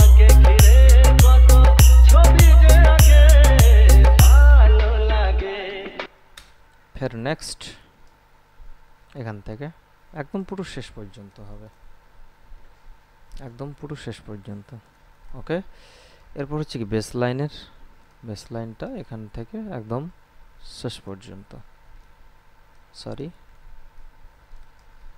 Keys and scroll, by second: 6.2 space.